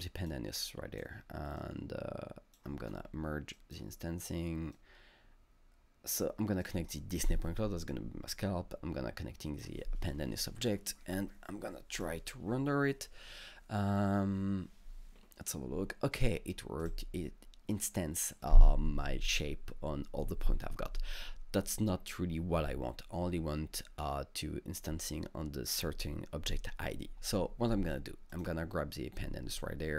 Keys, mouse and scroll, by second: 0.7 click, 1.6-3.5 drag, 2.9 scroll down 1, 4.8-7.9 drag, 7.9-11.9 drag, 11.9-14.6 drag, 16.8-19.4 drag, 28.3 click.